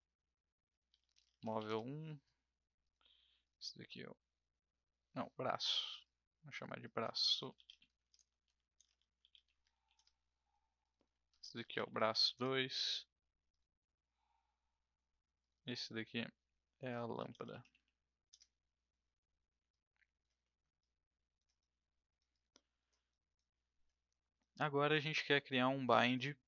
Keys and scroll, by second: 0.6-2.0 typing, 7.0-12.7 typing, 16.7-18.2 typing, 18.3 Return.